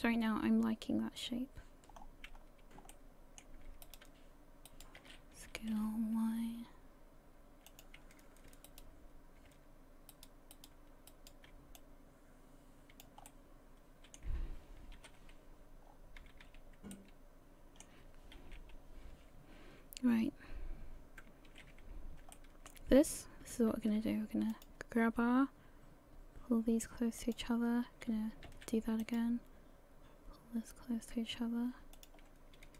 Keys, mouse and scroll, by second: 2.0-2.4 scroll down 4, 2.4-2.9 scroll up 3, 2.9 middle click, 3.8 right click, 4.7 shift+right click, 5.5 s, 8.7 shift+right click, 10.1 shift+right click, 10.5 shift+right click, 11.1 shift+right click, 11.8 click, 13.3 middle click, 14.9 KP_3, 15.9-16.3 scroll down 3, 16.2 a, 16.5 a, 16.9 middle click, 18.4 KP_1, 21.9-22.2 scroll up 1, 22.3 shift+middle click, 23.7 ctrl+r, 28.5 ctrl+r, 32.6 a.